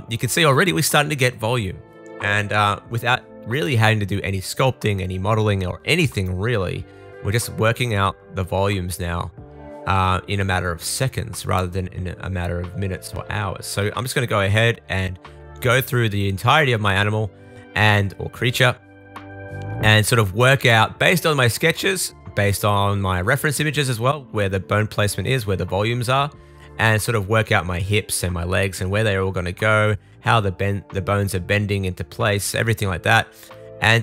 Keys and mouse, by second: 0.5 super+z, 2.7-9.1 middle drag, 9.1-10.5 drag, 10.6-12.0 middle drag, 12.6 middle click, 12.8 middle click, 13.5 super+z, 14.6-16.2 middle drag, 16.2 click, 16.3 middle click, 16.3 right click, 16.6 middle click, 16.6 right click, 21.1 super+s, 21.8 shift+middle click, 22.5 click, 22.7 shift+middle click, 23.3 shift+middle click, 23.6 shift+middle click, 23.9 super+s, 24.5 shift+super+middle click, 25.6 click, 26.7 super+z, 27.0-28.7 drag, 27.0-28.2 middle drag, 27.0-28.2 right drag, 28.7 middle click, 29.0 click, 29.2 middle click, 29.3 click, 29.4 middle click, 29.6 click, 29.6 middle click, 29.8 click, 29.8 middle click, 30.2 click, 30.3 middle click, 30.4 click, 30.5 middle click, 30.6 click, 30.8 middle click, 31.2 click, 31.3 middle click, 32.3 middle click, 32.6 click, 33.5 click.